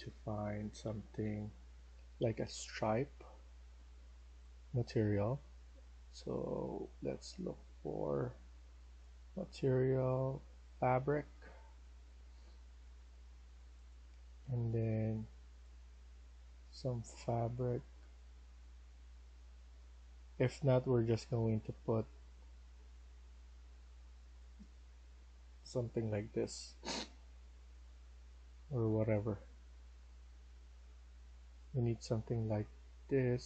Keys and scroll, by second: 0.0-1.6 typing.